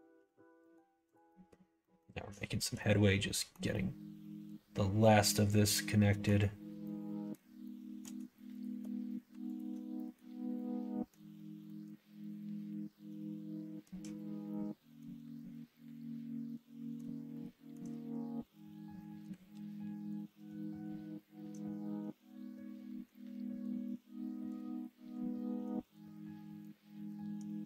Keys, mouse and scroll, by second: 0.1 f, 0.5 middle click, 1.1 click, 1.2 middle click, 1.7 middle click, 2.7 middle click, 3.7-6.2 middle drag, 6.8 middle click, 7.6 shift+middle click, 8.5 shift+click, 9.4 alt+click, 9.9 middle click, 10.5 middle click, 11.6-13.8 middle drag, 14.4 middle click, 15.4-16.9 middle drag, 17.3 shift+middle click, 18.8 middle click, 19.5 ctrl+e, 20.6 middle click, 22.9 middle click, 23.4 middle click, 24.5 click, 24.9 middle click, 25.4 middle click, 26.2-27.3 drag.